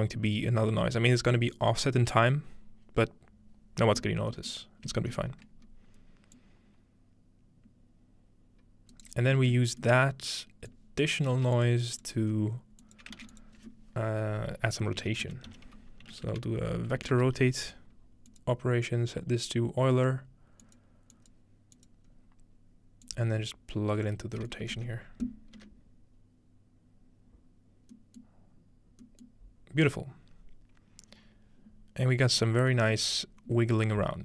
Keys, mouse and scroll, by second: 0.4-3.7 middle drag, 4.5 middle click, 6.4-9.5 drag, 8.9 right click, 9.1-9.5 ctrl+right drag, 9.7-10.2 scroll down 2, 10.8 click, 11.4 g, 11.6-12.0 scroll up 1, 11.7 drag, 12.1-12.8 drag, 12.3-13.9 scroll up 1, 13.1 shift+click, 13.2 typing, 13.5 click, 14.8-16.3 typing, 16.5 Down, 18.3 click, 18.9-20.1 drag, 20.6 click, 21.1 click, 21.8 click, 22.1 scroll up 1, 23.1-24.5 drag, 24.6-26.0 ctrl+middle drag, 27.9-30.4 middle drag, 34.1 scroll down 2.